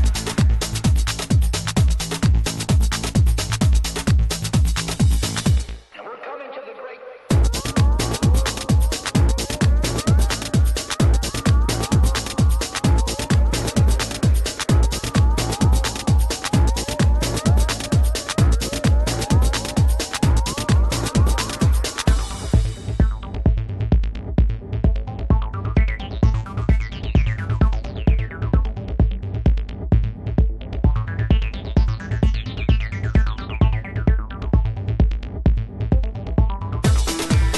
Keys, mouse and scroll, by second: 3.5-5.9 drag, 9.3-11.1 middle drag, 11.5-12.3 scroll up 1, 12.3 scroll up 1, 12.4-14.5 middle drag, 15.3-18.6 drag, 20.8-22.9 drag, 27.6-29.4 drag, 31.7-33.5 drag, 36.7-37.5 middle drag.